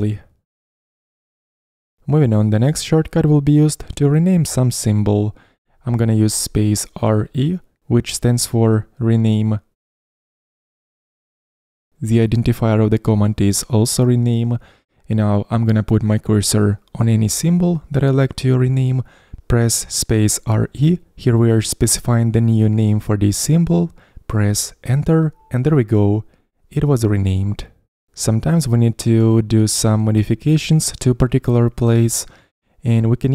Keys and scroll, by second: 21.1-21.9 typing.